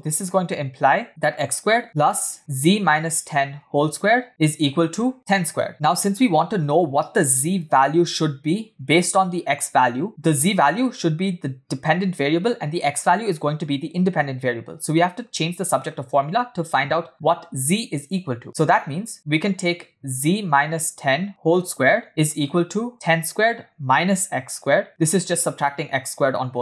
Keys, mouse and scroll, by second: 1.1 click, 2.1 click, 2.5 click, 3.5 click, 4.1 click, 4.5 click, 5.2 click, 7.8 click, 8.8 click, 10.0 click, 18.6 click, 18.9 click, 19.8 click, 20.3 click, 20.9 click, 21.7 click, 22.5 click, 23.5 click, 24.8 click.